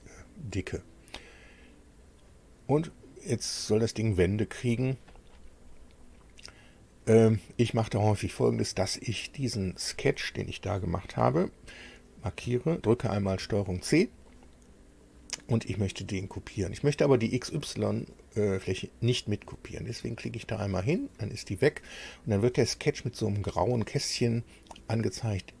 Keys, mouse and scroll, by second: 2.0 click, 9.3 click, 13.3 ctrl+c, 20.6 click.